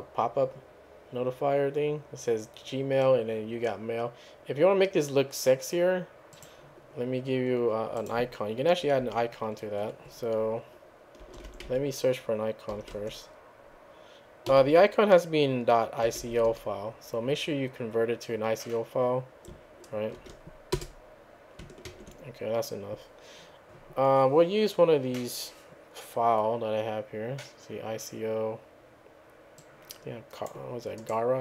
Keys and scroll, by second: 11.0-12.7 typing, 12.9 Tab, 14.3-17.0 typing, 20.2 typing, 20.7 Return, 21.9 ctrl+c.